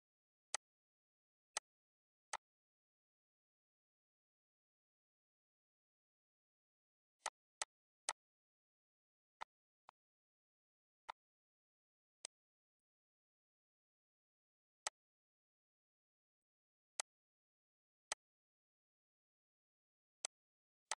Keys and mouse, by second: 0.6 click, 1.6 click, 2.3 click, 7.5 click, 9.7 click, 11.3 click, 12.5 click, 13.0 click, 15.1 click, 16.6 click, 17.3 click, 18.0 ctrl+d, 18.3 click, 20.4 click.